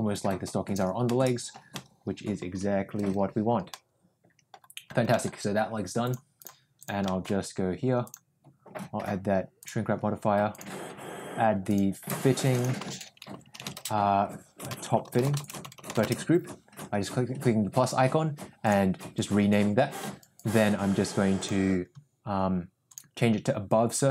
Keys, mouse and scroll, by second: 0.0 click, 1.0 middle click, 1.7 middle click, 3.7 middle click, 5.1 middle click, 6.1 click, 7.0 middle click, 8.1-9.8 drag, 10.5 drag, 11.9 click, 12.4 click, 12.5-16.5 shift+drag, 13.3 t, 15.7 t, 18.6 click, 21.3 drag, 22.9-24.1 drag.